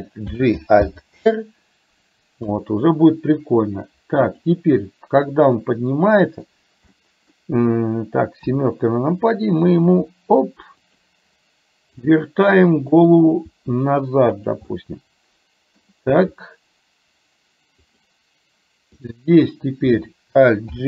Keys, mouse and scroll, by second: 0.5 alt+g, 0.9 alt+r, 2.5 KP_3, 4.5 click, 5.2-6.5 middle drag, 7.0 middle click, 8.5 KP_7, 10.0 r, 12.9 click, 13.5 r, 14.7-16.0 middle drag, 16.2 r, 19.0 click, 20.7 alt+g.